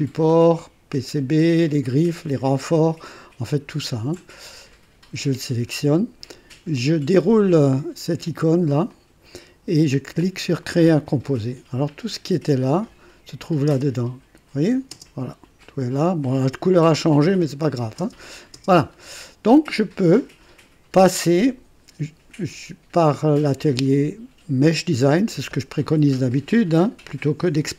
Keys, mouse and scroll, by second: 3.7 shift+click, 8.8 click, 10.6 click, 12.8 click, 13.7 space, 14.9 space, 15.6 click, 16.0 typing, 17.2 click, 18.0 space, 18.5 space, 19.6 typing, 24.9 click.